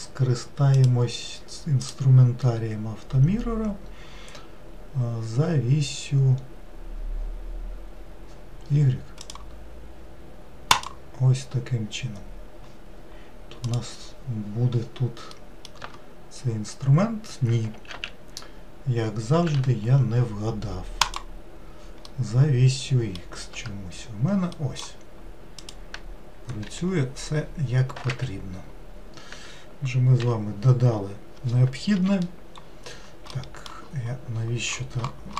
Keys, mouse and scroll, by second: 1.8-5.0 drag, 9.2 click, 10.7-13.7 drag, 15.3 middle click, 15.8 Tab, 17.9 ctrl+z, 19.4 ctrl+z, 21.0-22.1 drag, 22.1-23.5 middle drag, 23.5 Tab, 24.5-25.6 middle drag, 25.6 click, 26.6 g, 30.2 n, 31.9 KP_Decimal, 32.6-33.0 scroll down 8, 33.3 middle click, 34.3-35.3 scroll down 24.